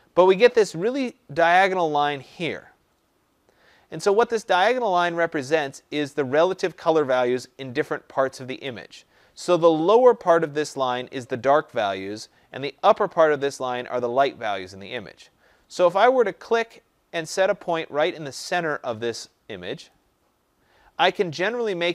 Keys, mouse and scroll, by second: 19.9-21.9 drag.